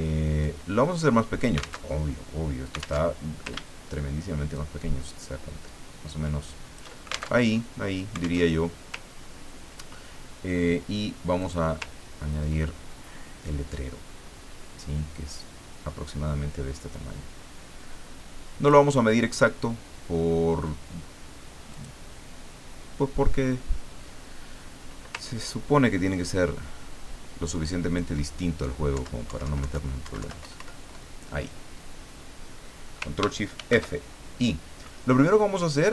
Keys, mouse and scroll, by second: 0.4 click, 1.9 alt+Tab, 3.0 alt+Tab, 4.5-7.0 ctrl+shift+drag, 7.4 ctrl+alt+shift+Tab, 8.4 alt+Tab, 9.0-9.4 ctrl+scroll up 2, 9.8 ctrl+scroll down 2, 11.4 click, 11.9-12.3 ctrl+scroll down 2, 14.8-19.6 drag, 21.7 click, 25.2-28.1 ctrl+drag, 28.9 Down, 30.4 Up, 33.5 ctrl+shift+f.